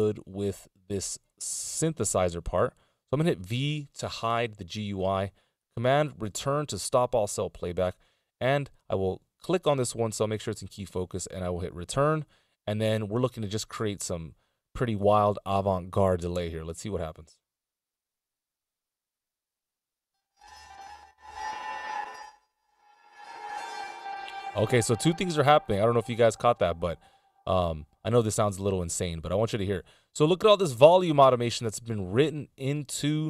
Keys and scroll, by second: 3.7 v, 6.5 super+Return, 16.6 Return, 24.1 space, 26.3 t, 27.6 a.